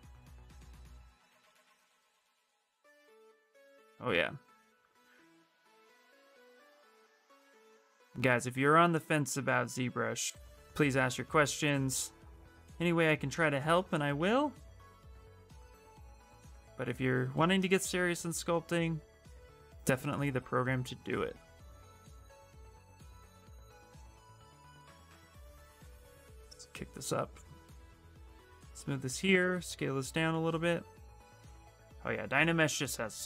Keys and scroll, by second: 5.0 q, 6.8 w, 19.0 q, 23.3 w, 23.8 space, 24.1 space, 28.0 space, 30.6 q.